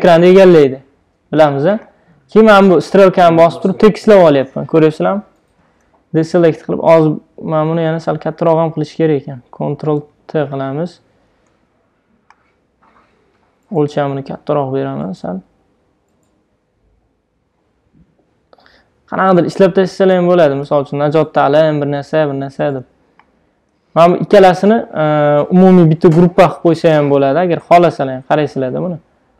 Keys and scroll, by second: 6.3 super+d, 10.1 super+t, 20.7 Return, 25.9 super+g, 27.5 super+z.